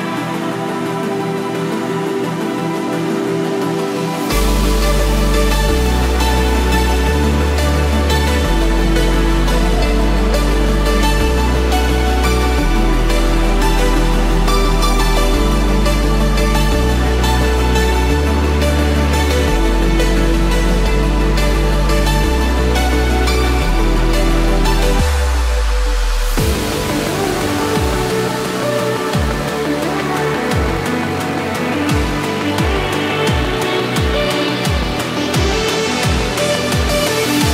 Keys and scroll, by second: 17.2 ctrl+-, 20.0 ctrl+=, 32.1 ctrl+z.